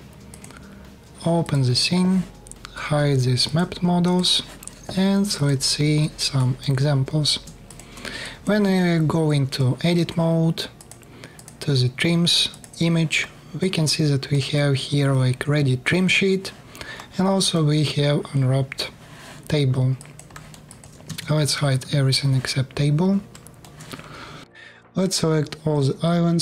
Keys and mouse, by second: 3.1 click, 3.8 click, 5.1 click, 5.3-5.8 alt+middle drag, 7.6 middle click, 7.9 alt+click, 12.4-17.4 middle drag, 19.6-20.6 alt+drag, 20.8 Tab, 21.0 KP_7, 21.4 3, 22.8 alt+click, 24.4-25.7 drag, 24.4 space, 24.4 KP_1.